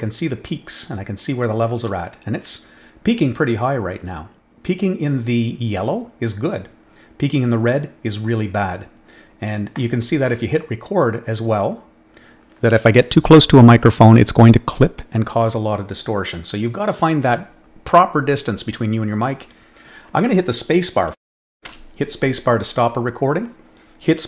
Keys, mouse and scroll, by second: 9.7 click.